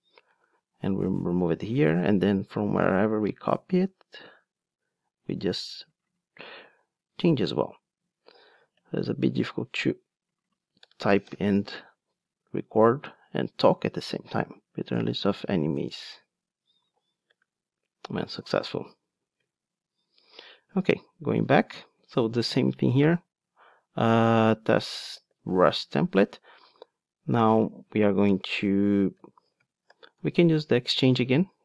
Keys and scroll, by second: 20.7 ctrl+Tab, 25.9 Return, 30.8 Return.